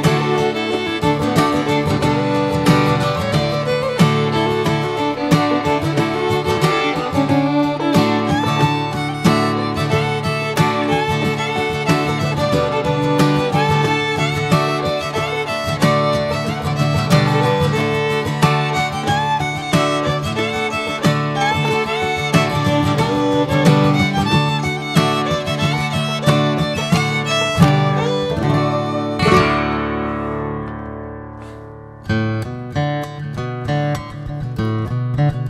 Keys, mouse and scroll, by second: 0.6 e, 1.3 alt+s, 4.0-5.4 drag, 7.7 click, 8.1 scroll down 2, 8.3 middle click, 9.2 shift+click, 9.6 middle click, 10.2 shift+click, 10.5 middle click, 11.0 shift+click, 11.4 middle click, 12.4 shift+click, 12.8 shift+click, 13.2 middle click, 14.1 shift+click, 14.4 shift+click, 15.0 shift+click, 15.4 middle click, 16.4 shift+click, 16.8 middle click, 17.4 shift+click, 17.9 middle click, 18.5-18.8 scroll up 3, 18.8 middle click, 19.6 scroll down 1, 19.8-21.6 middle drag, 21.6 e, 25.1-26.6 drag, 28.3-31.6 drag, 32.1-32.4 middle drag, 32.4 Tab, 32.5 drag, 32.9 drag, 33.2-33.9 right drag, 33.9 drag, 34.2-35.4 middle drag.